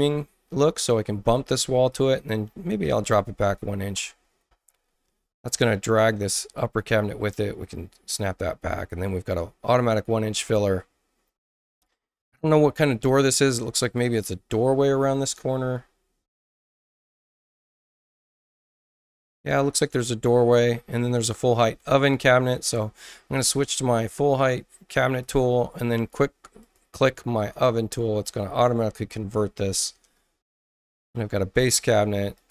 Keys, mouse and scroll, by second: 1.9-3.0 drag, 2.8 Return, 3.7 1, 3.9 Return, 5.5 click, 6.1 space, 6.5 click, 7.2 click, 13.8 click, 15.3-16.5 scroll down 8, 16.9-18.1 scroll up 8, 18.2-19.3 scroll down 6, 25.2 click, 26.6 click, 27.3 click, 31.8 click, 32.3 click.